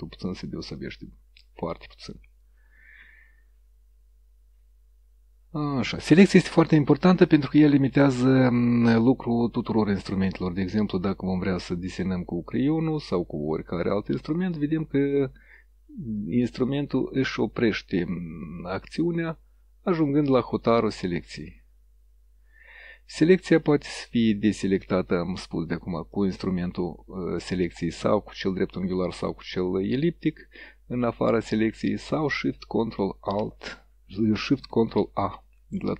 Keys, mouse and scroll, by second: 0.3 click, 0.7 click, 2.0 click, 10.0 click, 11.1-12.8 drag, 13.1-14.2 drag, 14.6-15.7 drag, 16.2-17.7 drag, 18.5-20.0 drag, 20.5 click, 24.9 click, 25.7 click, 26.2 click, 31.6 click.